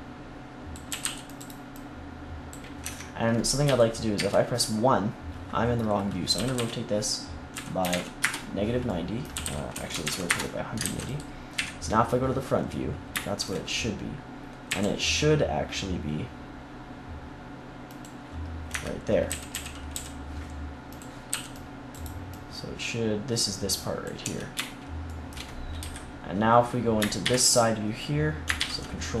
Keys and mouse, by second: 0.8 a, 1.0 c, 1.3-3.2 drag, 2.8 Tab, 3.6 KP_3, 4.1 KP_1, 6.3 r, 9.3 r, 10.8 ctrl+s, 11.5 KP_1, 14.6 g, 17.9 click, 18.7 Tab, 19.2 a, 19.5 a, 19.9 a, 21.2 c, 24.2 Tab, 25.7 KP_3.